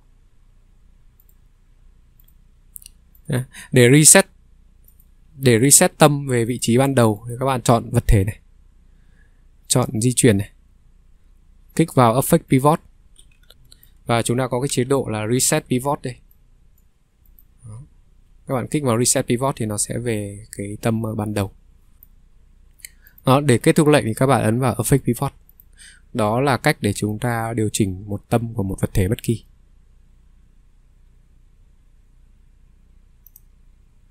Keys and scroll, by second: 6.0 Delete, 6.8 Delete, 13.4 Escape, 13.4 ctrl+3, 14.0 Escape, 14.0 ctrl+3, 14.8 ctrl+3, 17.7 Escape.